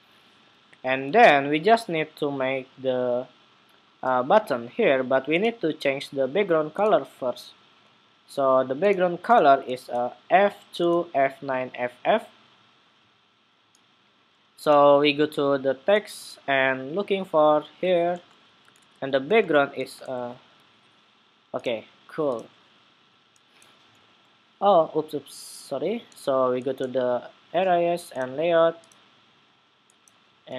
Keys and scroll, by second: 9.3 super+c, 19.9 super+v.